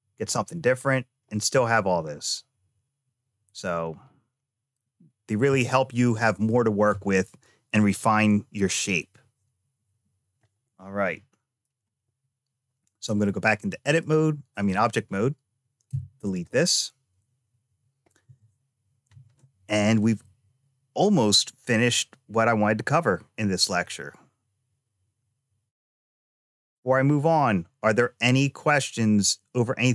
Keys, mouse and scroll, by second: 2.0-6.4 middle drag, 10.2 scroll up 1, 11.8 a, 13.7 click, 15.7 x.